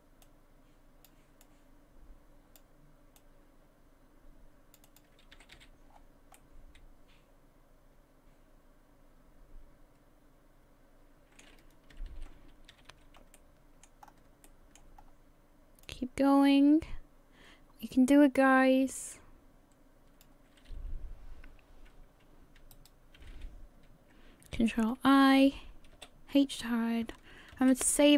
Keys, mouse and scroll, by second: 0.2 click, 1.4 click, 3.2 click, 4.9 click, 5.4 a, 5.6 a, 5.9-6.4 scroll down 5, 6.4 middle click, 12.1 alt+h, 12.7 a, 12.9 a, 13.4 middle click, 14.0 scroll up 2, 14.5 shift+middle click, 15.0 scroll up 1, 15.9 click, 22.7 shift+right click, 25.0 ctrl+i, 26.0 h, 27.6 ctrl+s.